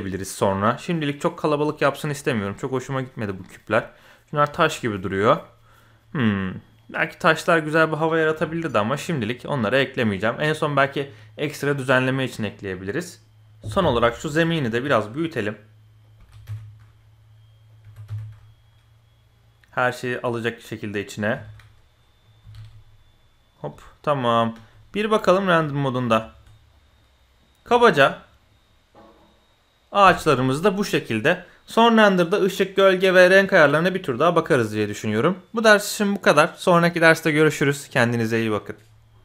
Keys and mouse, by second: 1.6 drag, 2.2 click, 2.9 middle click, 4.9 middle click, 5.3-5.9 middle drag, 6.2-6.5 middle drag, 6.7 middle click, 7.3 middle drag, 9.2 middle click, 12.7 middle click, 14.6 s, 16.2 s, 17.8 g, 20.2-20.9 drag, 21.3 KP_7, 22.4 s, 23.7-24.3 middle drag, 24.5 z, 24.9 middle click, 25.3 shift+middle drag, 26.2 shift+middle click, 26.7 click, 27.7 shift+middle click, 28.1 middle click.